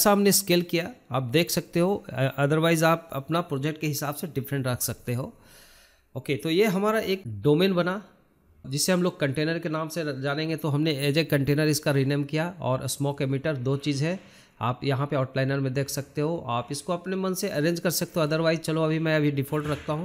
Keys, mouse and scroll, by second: 0.7 s, 3.8 g, 6.1 scroll down 3, 6.3-7.6 middle drag, 7.6 s, 10.4 g, 12.0 scroll down 2, 12.2-12.6 middle drag, 12.6 scroll up 6, 12.8-13.5 shift+middle drag, 13.5 scroll up 1, 13.6 scroll down 2, 13.7 shift+middle drag, 14.0 scroll up 1, 14.1 middle click, 14.3 scroll down 1, 14.7 shift+middle click, 15.2 scroll down 1, 15.4 shift+middle click, 15.9 click, 16.3 shift+middle click, 17.1 click, 17.7-20.0 drag.